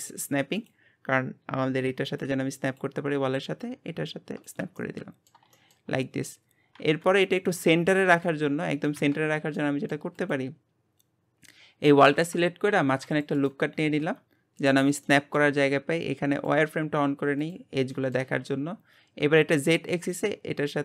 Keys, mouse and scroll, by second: 3.6 click, 4.8-5.9 middle drag, 5.9-6.8 scroll up 2, 7.0 KP_1, 7.6-8.2 scroll down 1, 9.1 scroll down 4, 9.5-10.2 middle drag, 10.2 click, 10.8-11.9 scroll up 1, 11.9 Tab, 12.7 ctrl+r, 14.1 Tab, 14.6 click, 15.0-16.3 middle drag, 16.3-17.9 drag, 17.9 middle click, 18.3-18.9 scroll up 1, 19.3 click.